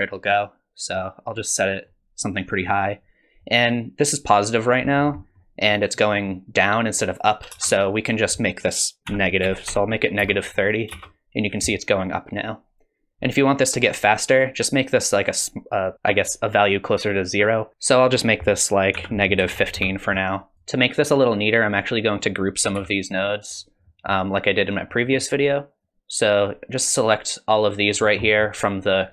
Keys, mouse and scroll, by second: 4.9-5.5 scroll up 4, 5.2 middle click, 7.5 space, 8.1 click, 10.9 space, 17.7 ctrl+z, 18.2 click, 20.5 click, 20.5 middle click, 20.5 scroll down 4, 21.7 click, 22.8 g, 23.8 middle click, 24.6 middle click, 25.8 click, 28.0-28.9 scroll up 4, 28.3 middle click.